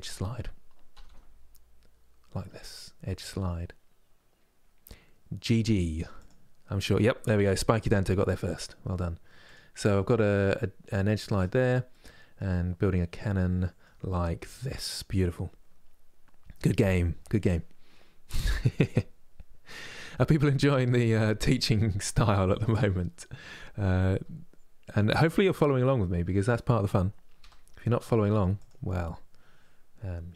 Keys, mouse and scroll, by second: 9.4-11.2 middle drag, 11.2-12.2 scroll down 1, 12.2-17.3 middle drag, 18.1 click, 18.5-22.4 middle drag, 22.4 KP_3, 23.8 g, 28.6-30.3 middle drag.